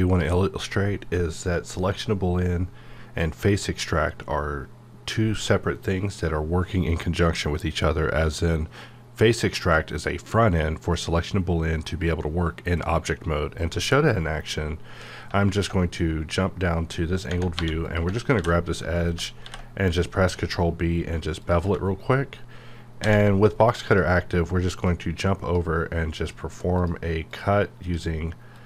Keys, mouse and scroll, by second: 15.1-17.3 middle drag, 17.3 Tab, 17.8 click, 18.3 ctrl+b, 19.0 right click, 19.4 ctrl+b, 20.0-20.8 scroll up 1, 21.4 click, 21.6 Tab, 21.9 scroll up 1, 23.0 d, 23.9-26.2 drag.